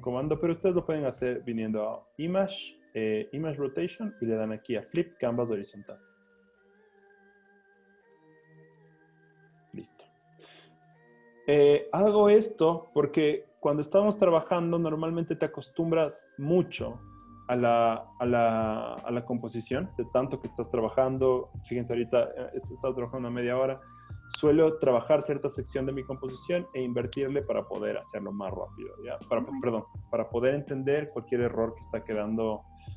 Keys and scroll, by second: 7.9 super+o.